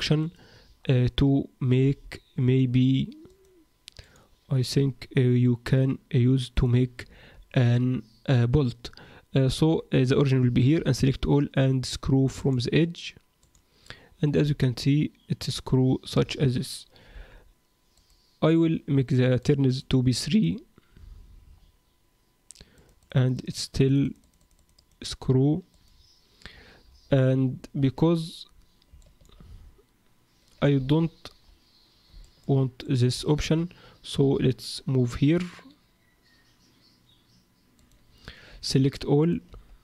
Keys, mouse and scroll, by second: 0.6-1.1 scroll down 2, 1.8 e, 4.0 click, 4.7 g, 6.5 click, 7.0-7.6 scroll down 4, 7.3 Tab, 9.5 Tab, 12.3 click, 12.3 a, 14.1-14.6 scroll down 2, 14.6 middle click, 17.1 KP_1, 17.9 click, 19.4 click, 19.7 click, 20.3 click, 21.0-22.2 scroll down 5, 22.2-22.7 scroll down 3, 22.7 click, 23.0-24.2 click, 23.1 click, 23.9 click, 24.0 click, 24.6 click, 24.8 click, 25.7 click, 26.5-27.7 scroll up 10, 27.7 z, 28.5-28.9 scroll down 3, 29.0 shift+middle click, 30.7 ctrl+z, 31.5-32.0 scroll up 2, 32.2 shift+middle click, 32.8 click, 33.2 shift+click, 34.1 g, 38.5 a, 39.2 click, 39.5 x.